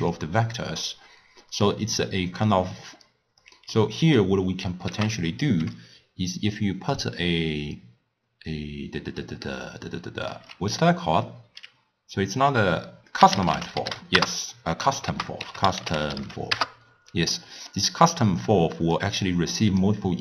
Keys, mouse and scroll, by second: 3.7-4.9 middle drag, 4.9 ctrl+a, 15.1 ctrl+a, 19.0 drag.